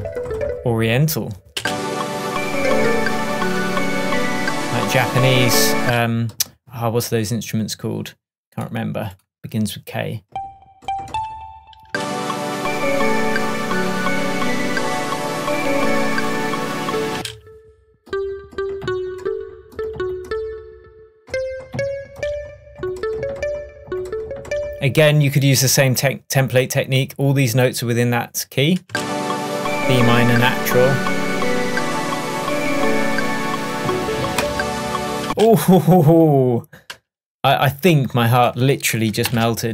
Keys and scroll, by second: 1.6 space, 5.9 space, 11.9 space, 17.2 space, 28.9 space, 35.3 space, 39.3 shift+super+m.